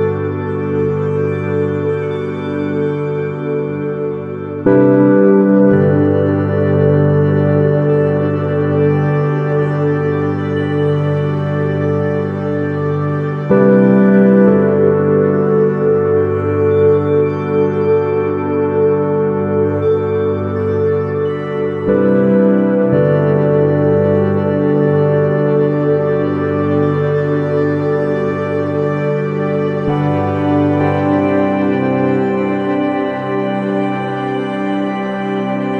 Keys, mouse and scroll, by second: 4.8 shift+z, 12.9 shift+z, 14.4 KP_1, 15.6-18.1 middle drag, 17.6 shift+a, 22.0-23.7 middle drag, 23.7-25.5 drag, 25.7 r, 28.7 s, 32.5-34.3 drag, 34.7-35.7 drag.